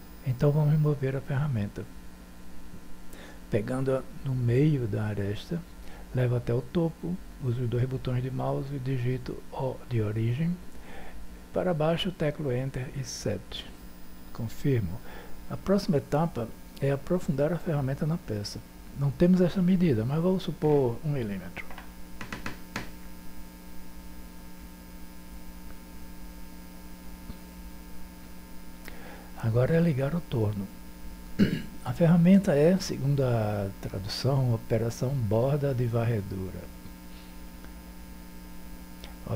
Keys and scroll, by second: 8.7 o, 12.3 7, 22.1 1.